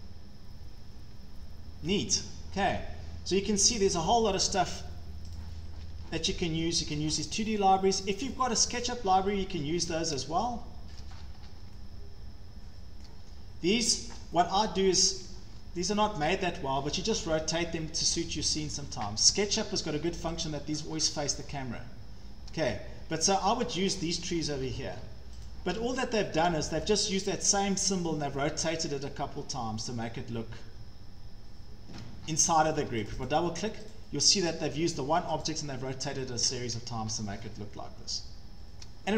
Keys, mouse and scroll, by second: 2.2 shift+middle click, 2.3-3.1 scroll, 3.8 click, 4.4 scroll up 6, 5.4 click, 5.9 Escape, 6.0 Escape, 6.6 scroll up 1, 6.9 click, 7.9 scroll down 3, 8.9 click, 8.9-9.2 scroll, 9.7 Escape, 11.0-11.5 shift+scroll, 13.1 shift+scroll, 14.0 click, 15.1-16.2 scroll, 18.7 middle click, 19.1 Escape, 19.3 Escape, 19.7-20.0 scroll, 20.4 click, 20.9 scroll, 22.5-22.9 scroll, 23.7-25.5 scroll, 24.8 Escape, 25.0 Escape, 25.5 click, 25.7-27.1 scroll, 31.3 shift+scroll, 32.2 scroll, 32.7 Escape, 32.9 Escape, 33.1 click, 33.3 click, 33.7 scroll up 6, 33.9 click, 35.4 click, 36.0 Escape, 36.2 Escape, 36.3 Escape, 36.3 scroll, 37.1 scroll, 38.8 shift+scroll.